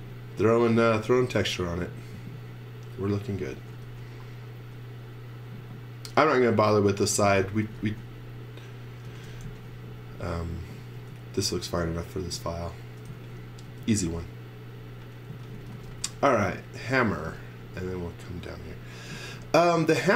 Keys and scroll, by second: 0.0-1.0 typing, 3.5 x, 3.8 v, 7.5 x, 7.8 v, 9.1 x, 9.4 z, 11.0 space, 13.1 z, 13.7 space, 15.0-17.2 typing, 19.1 z.